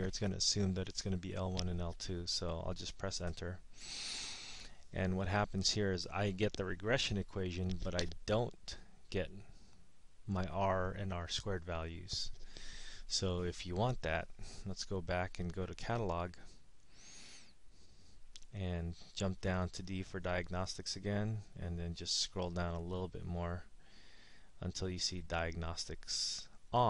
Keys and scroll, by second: 3.3 Return, 16.9 0, 21.2 Down, 21.8 Down, 22.4 Down, 22.9 Down, 23.5 Down, 24.1 Down, 24.5 Down, 24.8 Down, 25.2 Down, 25.5 Down, 25.9 Down.